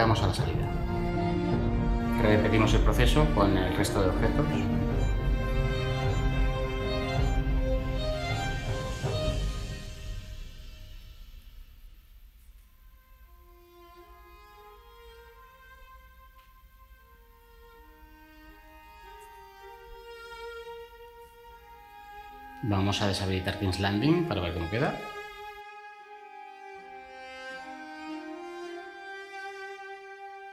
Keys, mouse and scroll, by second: 2.3 ctrl+v, 7.4 ctrl+v, 14.0 ctrl+v.